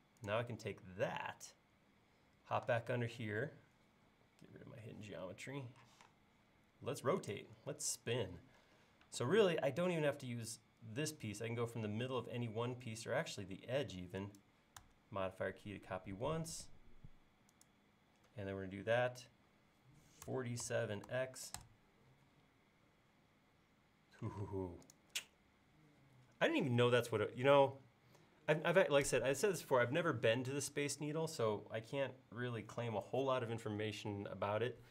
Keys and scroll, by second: 5.9 q, 20.3-21.6 typing, 24.4 space.